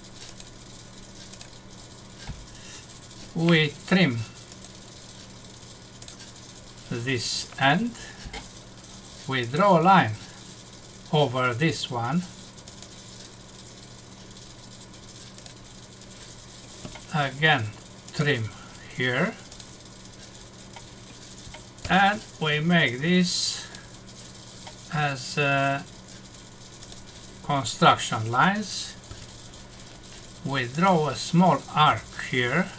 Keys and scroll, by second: 21.8 Escape, 29.1 Escape.